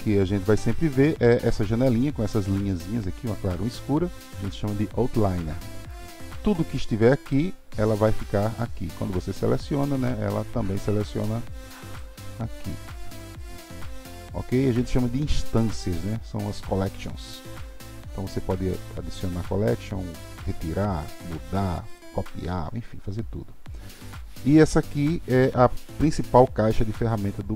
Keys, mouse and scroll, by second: 4.2 click, 7.2 click, 11.9 click, 13.4 click, 21.9 click.